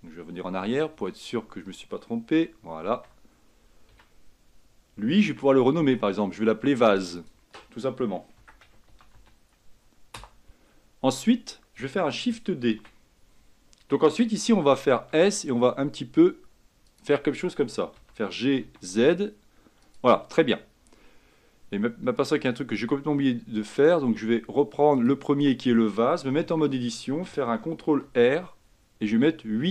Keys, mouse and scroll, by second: 0.7 ctrl+z, 1.1 ctrl+z, 2.4 a, 4.0 a, 5.4 Tab, 7.1-10.3 drag, 12.9 shift+d, 25.1-26.6 drag, 26.6 Tab, 28.1 ctrl+r.